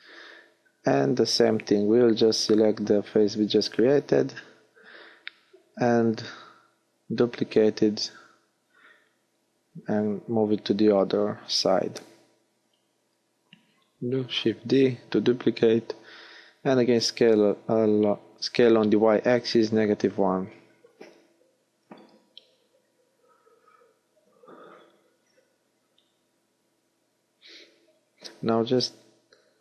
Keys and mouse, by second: 0.6-2.8 drag, 8.5 middle click, 12.4 shift+d, 14.9 s, 21.5 space, 29.3 g.